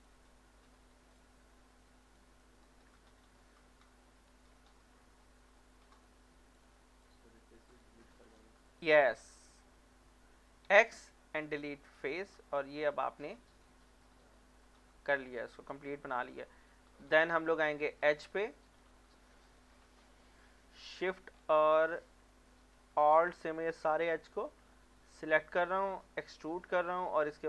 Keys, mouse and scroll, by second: 0.0 shift+click, 1.3 click, 2.4 middle click, 3.6 Tab, 4.6 middle click, 6.0 click, 6.6 shift+click, 10.7 x, 12.0 click, 12.3 scroll down 1, 12.6-14.3 middle drag, 16.2 Tab, 18.2 alt+click, 19.8 alt+shift+click, 19.9 middle click, 21.0 alt+shift+click, 21.4 scroll down 1, 21.8 middle click, 22.3 shift+middle click, 22.8 scroll up 1, 23.6 alt+shift+click, 23.9 scroll down 1, 24.2 middle click, 24.7 shift+middle click, 25.1 scroll up 1, 26.3 e.